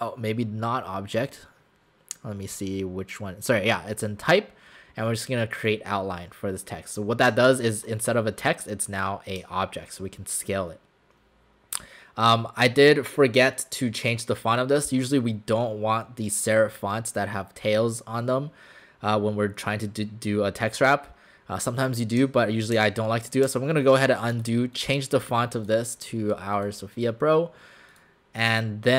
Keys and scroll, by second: 22.8 ctrl+z.